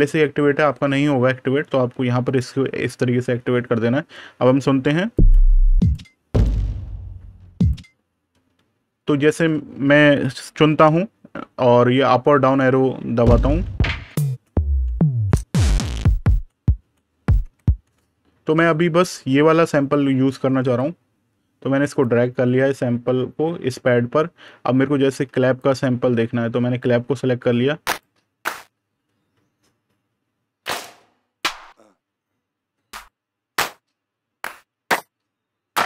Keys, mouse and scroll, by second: 2.1 click, 5.6 click, 8.2 super+KP_Subtract, 13.2 Down, 16.6 Down, 17.3 Up, 17.7 Down, 20.6 click, 24.9 super+KP_Add, 25.4 click, 26.7 super+KP_Subtract, 27.7 click, 31.2 click, 33.9-34.3 scroll down 1, 34.3 click.